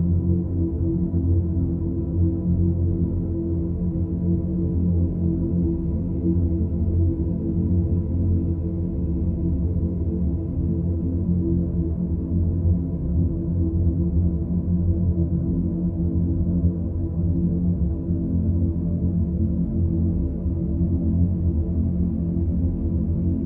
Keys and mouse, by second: 0.8 shift+click, 1.1-1.8 middle drag, 4.1 middle click, 5.4 ctrl+b, 10.3 Tab, 10.9-15.9 middle drag, 16.3 click, 16.6 click, 17.7 shift+click, 18.6 g, 21.8-22.3 drag, 23.0 click.